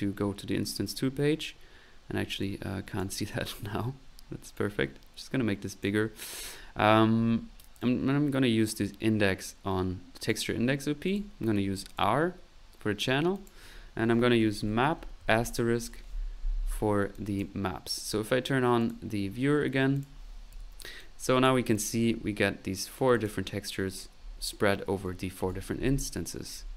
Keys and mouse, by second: 2.4 click, 4.5-6.0 drag, 6.3 click, 7.8-10.3 drag, 11.0 click, 13.3 click, 17.1 click, 18.0 middle click, 18.8 click, 19.4 middle click, 19.9 click, 20.6 p, 21.0 click, 21.7 click, 23.1 click, 25.6 p.